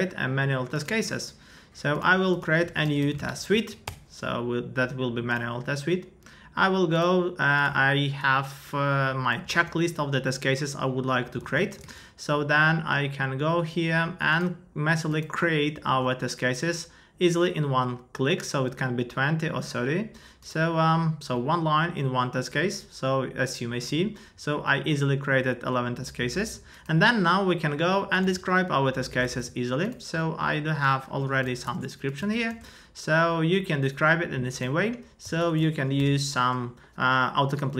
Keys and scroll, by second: 3.5 Down, 3.8 Return, 9.5 super+c, 11.4 super+c, 11.8 super+Tab, 15.8 super+v, 29.2 super+Tab, 31.4 super+c, 31.6 super+Tab, 32.2 super+a, 32.5 super+v, 35.2 Return.